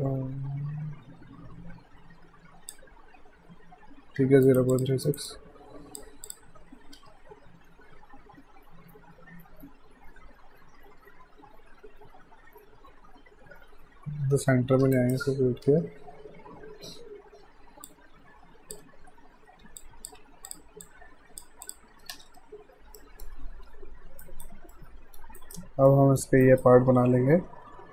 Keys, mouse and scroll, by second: 4.2 q, 4.5 right click, 4.7 click, 5.0 alt+right click, 5.3 alt+click, 7.0 w, 14.9 right click, 15.6 w, 17.6-18.4 typing, 17.9 click, 19.8 alt+click, 20.2 q, 20.5 click, 20.8 alt+click, 22.1 space, 23.0 alt+middle click, 24.3 alt+right click, 24.7 alt+middle click, 24.9 alt+scroll down 1, 25.4 alt+right click, 25.9 middle click, 26.4 right click.